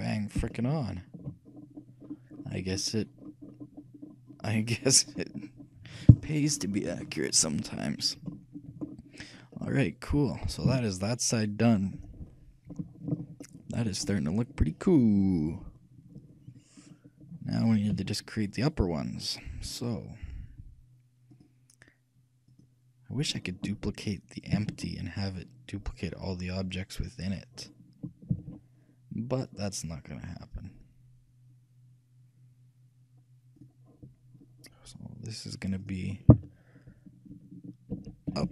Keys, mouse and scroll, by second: 6.3-8.1 right drag, 9.0-10.0 scroll down 1, 10.0-11.4 middle drag, 10.8 z, 13.6-16.9 middle drag, 17.0-19.3 middle drag, 18.1 KP_3, 21.5-24.5 drag, 24.7 shift+d, 27.4-29.2 drag, 28.5 shift+d, 35.8-37.9 drag.